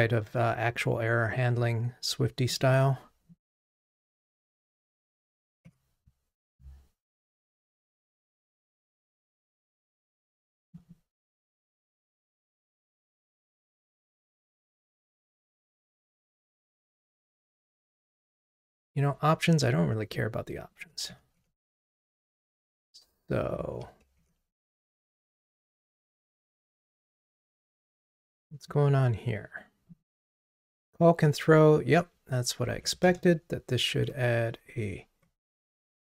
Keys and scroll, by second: 0.3 super+BackSpace, 24.2 super+BackSpace, 27.0 super+BackSpace, 27.1 super+/, 33.1 alt+Return.